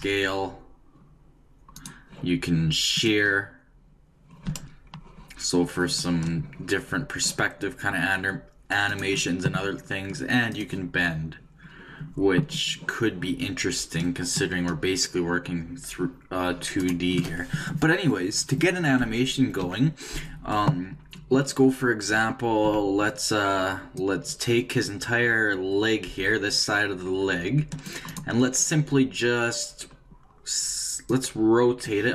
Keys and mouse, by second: 2.9-4.8 drag, 10.5-12.4 drag, 19.6 a, 22.6 c, 29.7 right click, 31.1-32.1 drag.